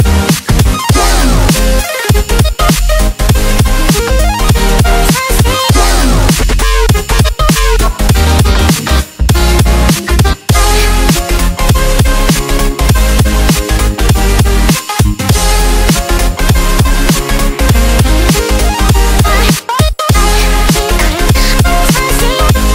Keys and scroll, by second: 0.6 space, 1.1 alt+super+space, 1.2 alt+super+space, 1.3 alt+super+space, 1.3 alt+super+space, 1.6 alt+super+space, 1.7 alt+super+space, 2.3 alt+super+space, 2.3 alt+super+space, 4.0 space, 4.5 space, 5.4 super+space, 5.6 super+space, 5.6 super+space, 5.7 super+space.